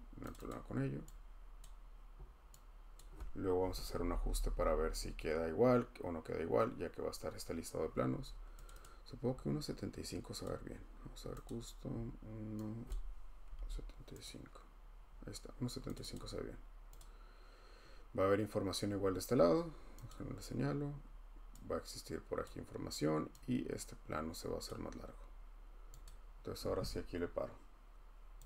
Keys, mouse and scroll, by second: 0.3 click, 0.5 click, 1.6 click, 2.0 scroll, 3.0 click, 3.7 Right, 3.8 Right, 4.1 Right, 4.3 Right, 4.4 Right, 8.7 click, 8.8 click, 10.4 click, 11.5 click, 12.9 click, 13.3-14.1 typing, 14.2 click, 15.9 click, 16.1 click, 17.0 click, 20.1 click, 23.0 click, 24.6 click, 26.1 click.